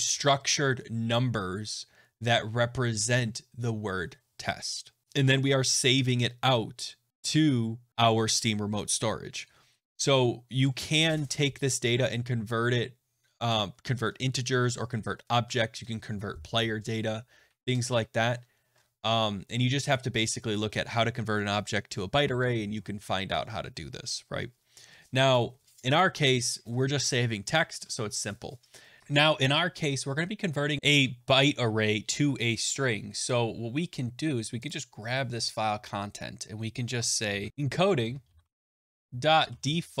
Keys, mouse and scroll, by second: 7.1 click, 10.9 click, 29.0 click, 34.6 click, 37.5-40.0 typing.